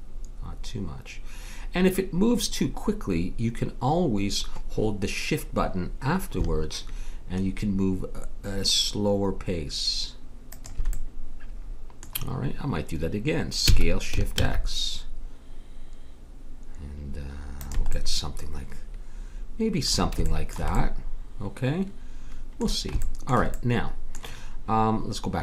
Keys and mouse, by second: 10.9-13.6 middle drag, 13.6 s, 17.9-19.7 middle drag, 20.3-22.8 middle drag, 23.6 middle click.